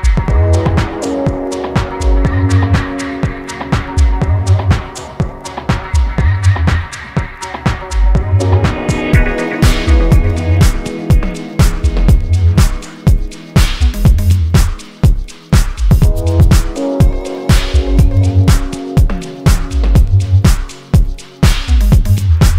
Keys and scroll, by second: 3.9 ctrl+shift+g, 8.6 ctrl+j, 11.7 Delete, 15.6 ctrl+t.